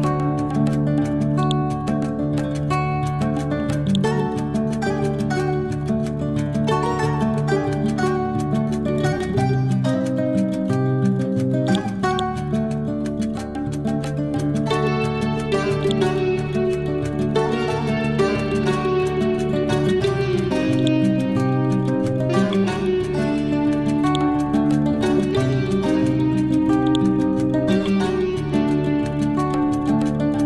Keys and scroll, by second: 6.1 Right, 10.3 ctrl+u, 14.1 Delete, 17.7 Delete.